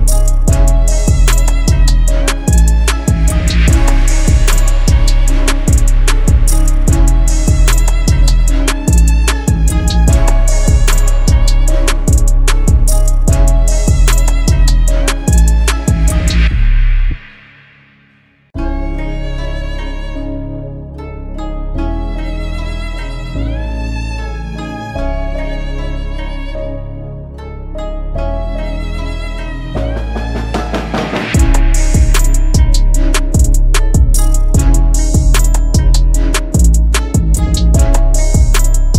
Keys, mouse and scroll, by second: 5.5 right click, 7.8-8.6 typing, 13.5-13.8 typing, 23.0 double click, 28.0 right click, 33.9 alt+click.